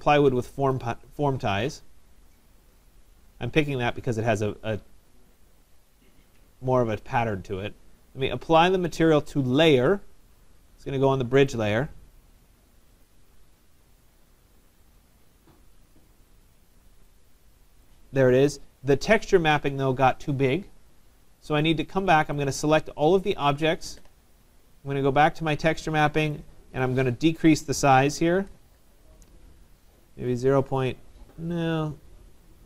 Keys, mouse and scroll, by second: 0.8 click, 2.4 click, 2.7 click, 5.9 click, 6.7 right click, 8.6 right click, 8.6 click, 9.5 click, 11.6 right click, 13.1 click, 14.9 click, 16.0 click, 16.7 middle click, 16.7 middle click, 17.9 right click, 21.6-21.9 scroll, 21.9 middle click, 23.3 click, 26.4 click, 28.0-29.1 typing, 29.3 Tab.